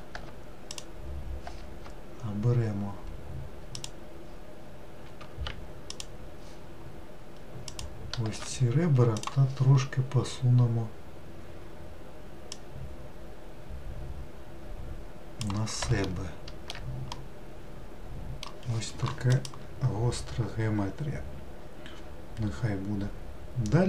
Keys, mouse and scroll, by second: 0.7 alt+click, 3.8 alt+click, 5.9 alt+shift+click, 7.7 alt+shift+click, 9.2-12.3 drag, 12.6 click, 16.1 alt+middle click, 17.1-20.3 middle drag.